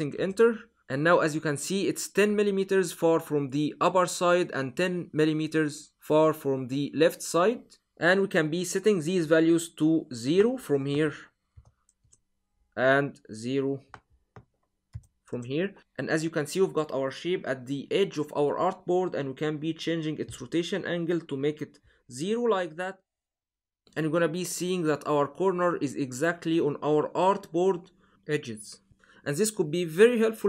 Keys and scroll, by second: 0.0 Return, 11.4 0, 11.8 Return, 14.8 0, 15.1 Return.